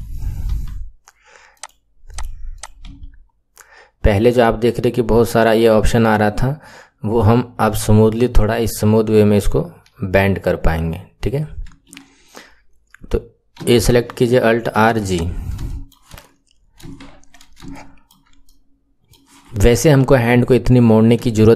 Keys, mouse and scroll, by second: 0.6 r, 2.0 click, 2.4 click, 2.8 r, 13.4 a, 14.3 alt+r, 14.8 alt+g, 15.0 click, 15.6 shift+middle click, 16.4-17.6 scroll down 2, 17.6-19.9 shift+middle drag, 19.9 KP_1, 20.8-21.2 scroll down 2, 21.2-21.5 shift+middle drag.